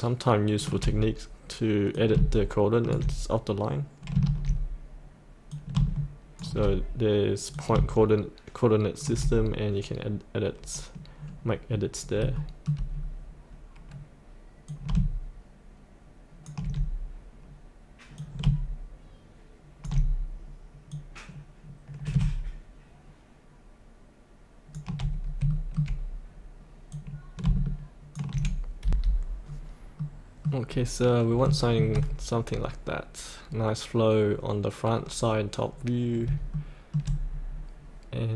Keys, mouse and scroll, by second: 4.3 ctrl+z, 5.5-9.5 drag, 11.3-12.2 scroll up 1, 12.3 shift+middle click, 12.9-14.6 scroll down 1, 14.6-24.8 drag, 25.2 scroll up 1, 25.5 shift+middle click, 26.9 click, 28.8 F8, 29.4-29.9 scroll down 1, 29.9 middle click, 30.6-31.4 scroll up 1, 32.3 scroll up 1, 32.5 scroll down 1, 36.5 shift+middle click, 37.3-38.3 scroll up 1.